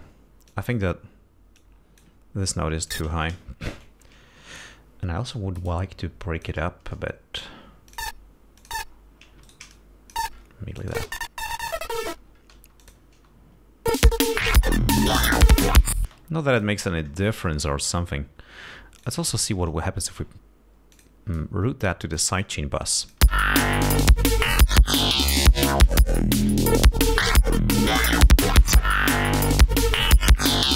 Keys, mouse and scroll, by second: 0.9 click, 2.0 click, 3.3 click, 4.1 alt+shift+Down, 4.8 alt+shift+d, 5.7-7.0 drag, 7.0 ctrl+scroll up 2, 8.3 click, 9.0 click, 9.8 shift+right click, 10.1 shift+click, 11.2 click, 11.3 space, 12.4 ctrl+scroll down 2, 13.0 ctrl+space, 13.2 ctrl+click, 14.3 click, 14.8 ctrl+scroll down 2, 15.9-16.4 ctrl+scroll down 4, 16.4 space, 16.6-17.3 ctrl+scroll up 5, 18.0-18.7 ctrl+scroll down 4, 19.4 click, 21.3 click, 22.6 click, 23.2 click, 23.6 space, 25.9 click, 30.5-30.7 drag.